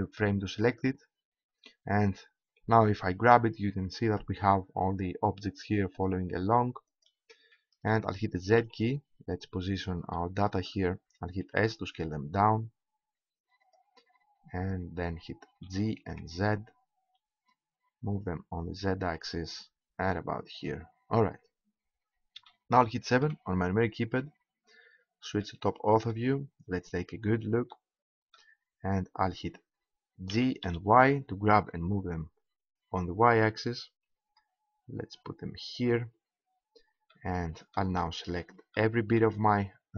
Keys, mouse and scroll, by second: 0.7-2.4 right drag, 2.4 g, 7.0 middle click, 7.6-8.9 drag, 8.5 z, 11.4 s, 13.8 click, 14.6-15.6 middle drag, 15.7 g, 21.2-23.2 middle drag, 23.2 KP_7, 30.3 g, 35.8-37.4 drag.